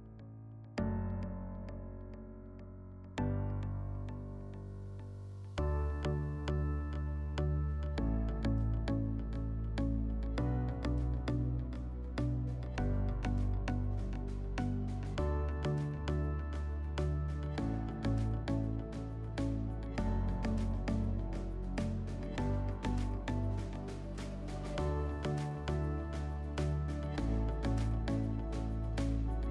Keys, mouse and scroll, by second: 1.2 click, 2.9 click, 4.4 click, 5.8 click, 5.9 click, 6.0 click, 6.4 click, 7.0 click, 8.5 click, 9.6 click, 10.7 alt+w, 11.8 alt+w, 13.8 click, 17.6 click, 20.6 click, 22.5 click, 23.2 click, 24.0 click, 25.9 click, 27.8 click, 28.7 middle click, 29.0 scroll.